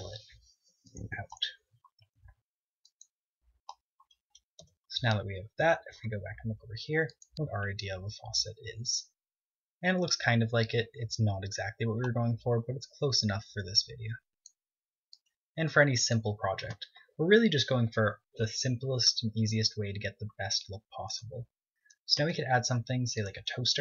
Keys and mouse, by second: 1.0 click, 2.1 ctrl+Tab, 4.5 Tab, 11.8-13.5 drag, 13.0 z, 15.3 click, 18.3 z, 18.7-20.1 middle drag, 19.4 KP_0, 22.6-23.8 drag, 23.7 shift+a.